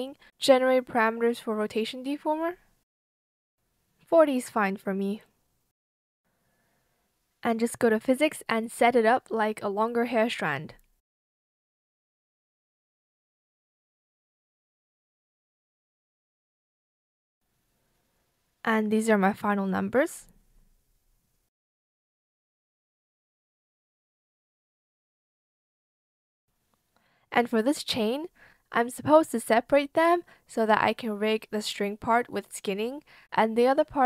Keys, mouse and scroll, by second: 3.3 Right, 3.6 BackSpace, 7.2-8.6 typing, 16.0 KP_3, 16.2 Return, 16.2 KP_0, 27.2 ctrl+z.